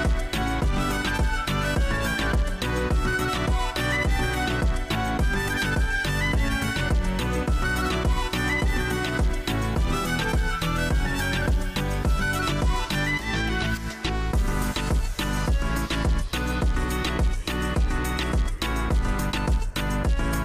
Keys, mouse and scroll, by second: 4.8 scroll down 2, 5.2-5.8 scroll up 5, 6.7 scroll up 5, 6.9-7.4 scroll down 4, 8.2 click, 12.1-13.1 drag, 13.4 scroll, 15.4-15.9 scroll up 1, 19.1 scroll up 1, 19.2 scroll.